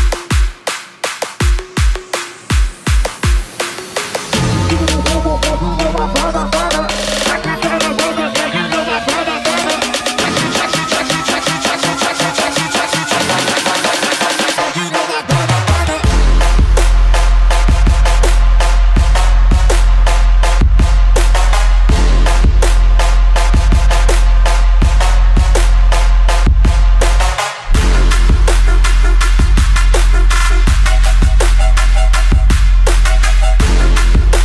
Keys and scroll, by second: 12.9 ctrl+z, 16.8 Delete, 18.8 ctrl+-.